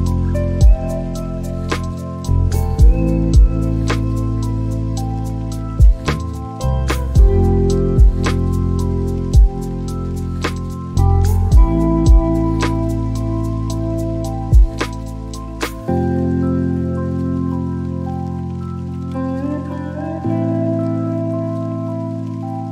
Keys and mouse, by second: 13.9 click, 21.8 click, 22.5 click.